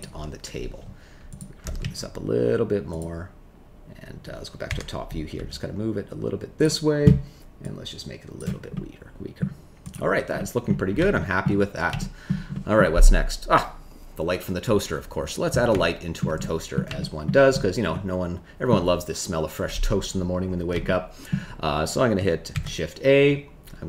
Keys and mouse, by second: 1.6 g, 1.8 z, 4.6 KP_7, 5.3 g, 7.7 click, 8.7 middle click, 9.8 click, 10.3 middle click, 11.1 shift+middle click, 11.9 shift+middle click, 12.5 middle click, 15.7 shift+middle click, 16.4 middle click, 16.9 shift+middle click, 17.9 middle click, 20.8 shift+middle click, 22.5 shift+a.